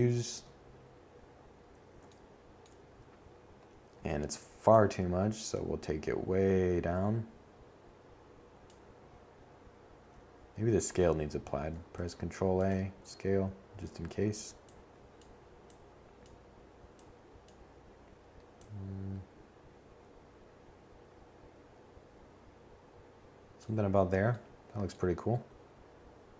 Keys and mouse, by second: 2.2-9.4 drag, 9.4 ctrl+a, 12.1 click.